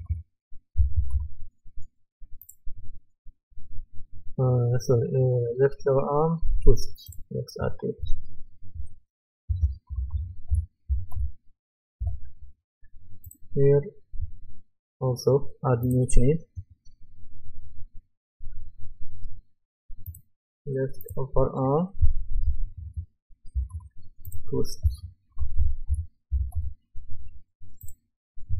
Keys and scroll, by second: 0.1-1.6 typing, 8.0 Right, 10.1-11.4 typing, 12.0 Return, 22.1-24.2 typing, 25.6-26.8 typing.